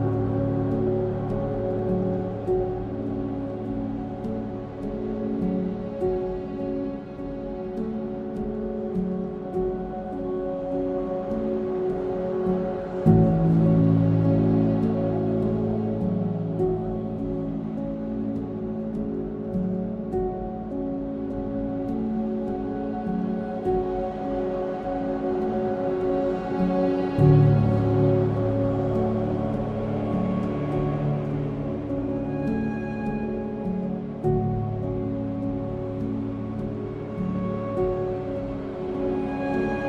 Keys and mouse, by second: 1.4 g, 1.7 z, 2.5 click, 3.0 ctrl+click, 3.9 ctrl+click, 4.7 alt+z, 6.0 3, 7.6 2, 8.4 1, 8.8 ctrl+click, 11.0 g, 11.4 x, 13.2 click, 15.2 2, 15.6 alt+click, 17.4 g, 17.6 y, 18.5 Escape, 19.1 1, 21.2 g, 21.5 x, 22.4 click, 23.4 2, 25.2 ctrl+b, 27.9 click, 28.7 middle drag, 29.8 2, 31.0 alt+click, 32.5 alt+shift+click, 34.9 alt+shift+click, 36.0 e, 36.3 x, 39.4 click.